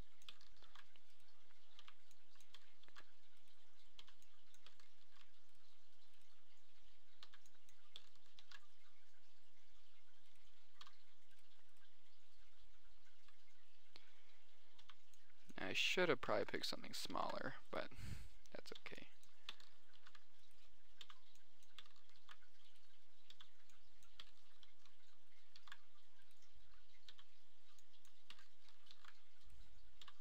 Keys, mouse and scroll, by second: 0.1 click, 0.7 click, 0.9 ctrl+j, 1.9 click, 2.1 b, 3.3 ctrl+j, 4.3 click, 4.3 b, 5.4 ctrl+j, 7.7 b, 8.8 ctrl+j, 10.3 middle click, 11.2 g, 12.7-13.3 drag, 14.5 click, 15.1 middle drag, 15.2 b, 17.5 ctrl+j, 19.1 b, 20.3 ctrl+j, 21.4 b, 21.7-22.4 drag, 22.5 ctrl+j, 23.7 b, 26.0 ctrl+j, 27.1 click, 27.5 b, 27.7 click, 28.3 click, 29.3 ctrl+j.